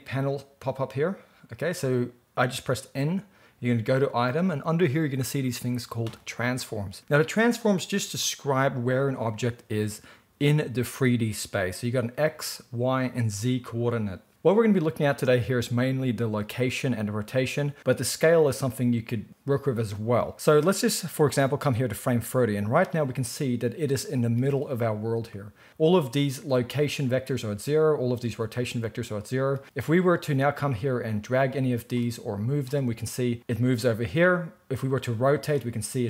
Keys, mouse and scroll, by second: 0.7-21.7 middle drag, 21.7-36.0 drag.